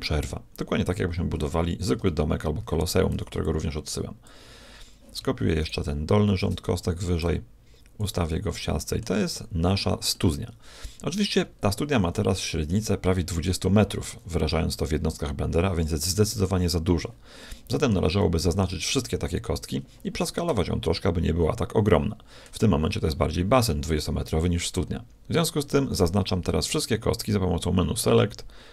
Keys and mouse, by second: 1.9 KP_1, 2.5 a, 3.1 b, 5.5-7.3 right drag, 6.3 shift+d, 7.3 click, 8.5-13.9 middle drag, 15.5-17.2 middle drag, 17.4-20.5 middle drag, 27.1-28.7 drag.